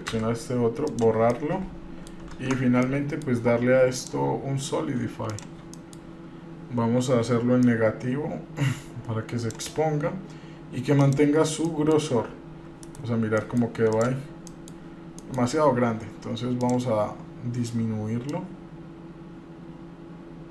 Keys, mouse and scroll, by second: 0.3 Delete, 1.5 middle click, 2.5 Tab, 3.0 middle click, 4.2-5.6 drag, 5.9 middle click, 6.3-6.8 scroll up 3, 7.8-9.8 drag, 11.2 click, 11.8-12.1 middle drag, 12.3-12.6 scroll down 1, 12.8 scroll up 1, 13.0 KP_Divide, 13.6-13.9 middle drag, 14.2 drag, 14.7 middle drag, 15.0 scroll up 1, 15.4 middle click, 16.8 click, 18.5-20.5 drag.